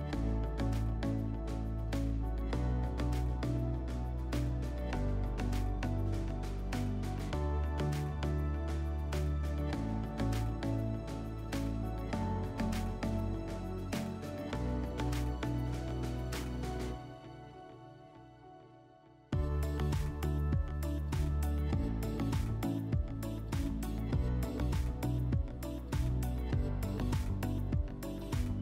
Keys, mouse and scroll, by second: 1.1-2.7 drag, 3.8 middle click, 13.1-15.0 drag, 17.9 click, 20.2-21.8 drag, 28.5-28.6 drag.